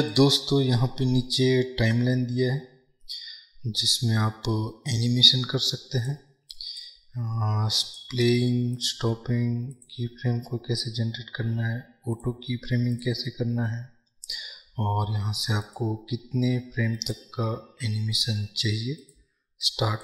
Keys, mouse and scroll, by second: 0.4 click, 5.2-8.5 drag, 9.0-20.0 drag.